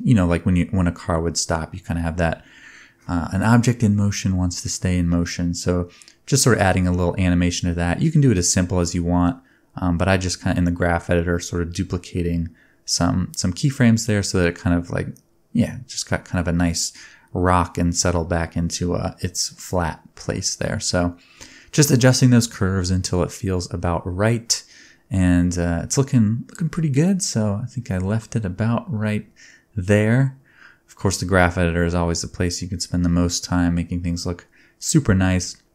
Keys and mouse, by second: 0.0-0.9 drag, 0.9-3.6 middle drag, 2.4 space, 3.6 click, 3.8 middle click, 4.0-6.1 shift+drag, 4.2 shift+d, 6.1-7.4 middle drag, 6.2-10.4 typing, 7.4 click, 7.8 click, 8.4 middle click, 8.4-10.3 drag, 10.3-12.8 middle drag, 12.4 space, 12.8-14.1 drag, 12.9 g, 14.1 middle click, 14.2 space, 15.6 space, 16.1 click, 16.4 click, 16.5 g, 17.1 space, 20.9 click, 21.5 space, 21.9 click, 22.0 g, 22.6 middle click, 22.6 right click, 22.7 space, 23.5-24.4 middle drag, 24.2 space, 24.4-25.6 drag, 24.6 g, 24.9 g, 25.4 space, 28.4 middle click, 28.9 space, 29.2-30.9 drag, 30.3 g, 30.9-31.5 shift+middle drag, 31.5-35.7 drag, 33.0-35.2 middle drag, 33.0-35.2 right drag.